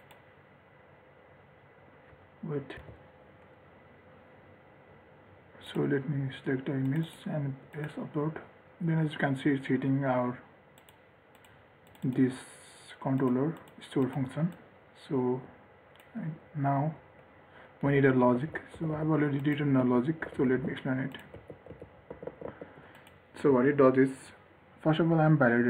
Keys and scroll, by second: 18.3 ctrl+x.